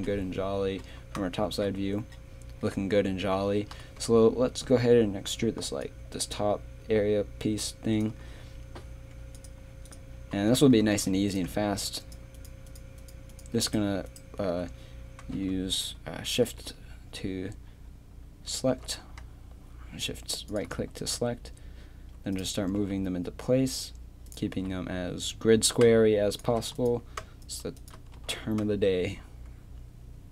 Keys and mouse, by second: 0.0 KP_7, 3.7 KP_3, 4.0 z, 4.5 z, 5.6 d, 9.9 click, 10.8 click, 12.0-16.0 right drag, 18.7 e, 21.1 right click, 21.9 right click, 22.8 g, 24.3 right click, 24.5 g, 28.2 g.